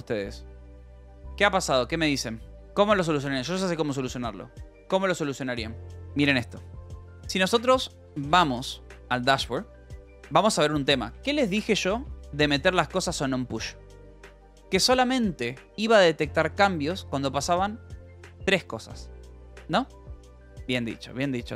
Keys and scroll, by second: 7.7-13.1 typing, 9.9 Return, 14.9 j, 15.5 j.